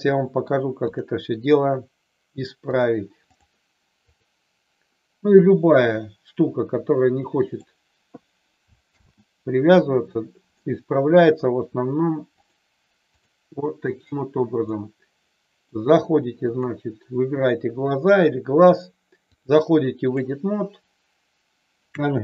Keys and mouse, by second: 0.1 middle click, 0.9 click, 2.7 click, 5.8-7.6 drag, 8.8 ctrl+z, 10.6-11.3 middle drag, 12.3-13.2 drag, 13.6 middle click, 14.6-15.7 middle drag, 16.4 click, 19.2-20.2 drag.